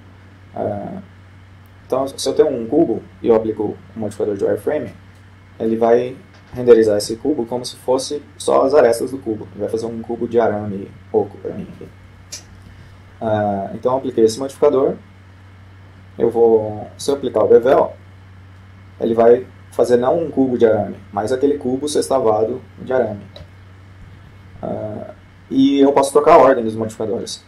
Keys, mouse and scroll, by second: 0.0-1.2 drag, 7.6 F12, 14.1-16.2 middle drag, 14.9-15.5 scroll down 1, 15.5-15.8 scroll down 1, 17.6-19.6 drag, 24.7 F12.